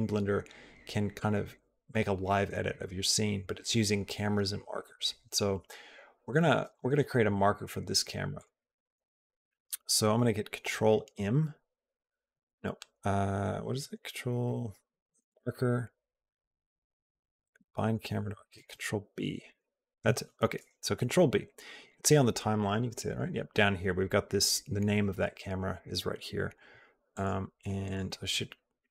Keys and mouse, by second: 10.7 ctrl+m, 15.1-18.2 drag, 19.3 ctrl+b, 26.9 click, 27.6 click, 28.5 click, 28.7-28.9 drag.